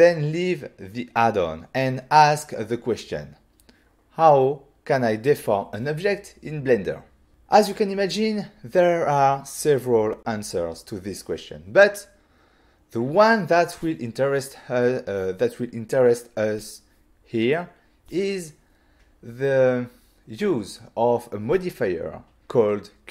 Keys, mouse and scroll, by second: 2.3 click.